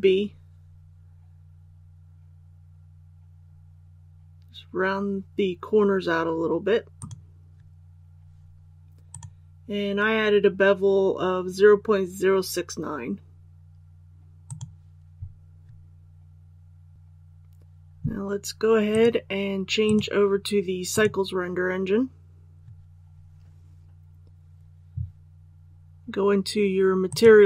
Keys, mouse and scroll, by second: 6.9 click, 9.1-22.0 drag.